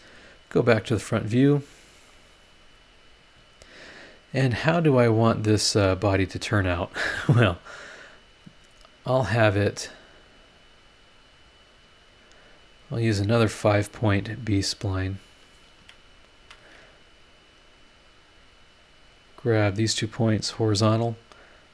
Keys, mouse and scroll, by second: 1.1 click, 1.7 scroll down 2, 2.1 scroll up 2, 6.9 scroll up 2, 10.0 click, 11.4 click, 12.5 click, 13.1 click, 13.9 click, 15.2 click, 15.8 Escape, 16.4 Escape, 17.2 click, 17.6 click, 19.3 click, 20.3 h.